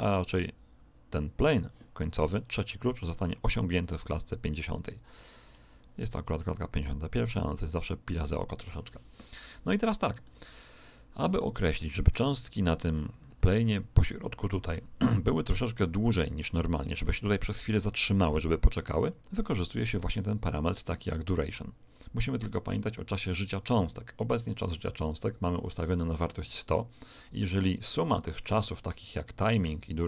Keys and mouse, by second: 3.2-5.1 middle drag, 7.2 click, 9.3-13.2 middle drag, 13.2 click, 13.2 right click, 16.4-18.3 middle drag, 19.8 right click, 24.4-26.8 middle drag, 28.0-30.0 middle drag.